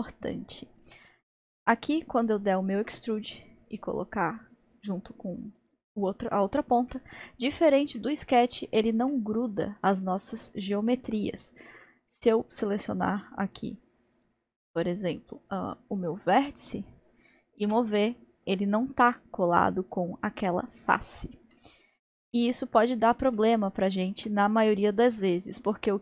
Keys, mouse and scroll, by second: 1.6 e, 4.5-4.9 scroll down 1, 4.9-13.1 middle drag, 13.1 click, 14.1 click, 14.6 middle click, 15.3-15.9 middle drag, 15.9 click, 16.8 click, 17.6 g, 21.5-24.9 middle drag.